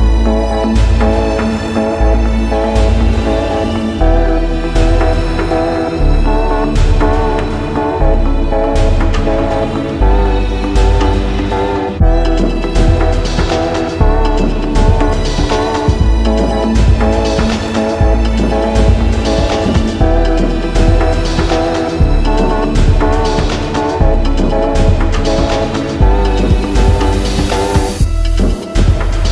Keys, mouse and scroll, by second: 0.0 click, 1.0 click, 1.8 click, 3.2 click, 4.0 click, 6.2 click, 7.5 click, 8.7 click, 10.4 click, 11.8 click, 13.1 click, 13.3 ctrl+t, 14.0-14.7 scroll down 4, 15.5 click, 17.6 alt+click, 19.1 click, 19.5 scroll down 5, 19.7-20.7 scroll up 9, 20.8-22.0 drag, 22.6 alt+click, 23.8 click, 25.5 click, 27.3 click, 28.8 click.